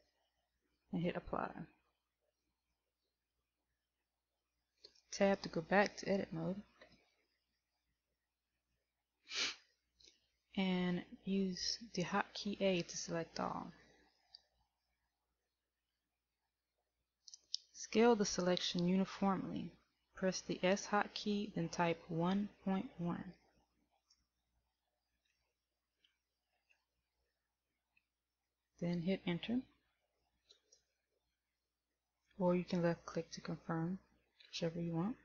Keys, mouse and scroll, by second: 3.1 click, 6.0 right click, 7.1 Tab, 16.1 a, 24.1 s.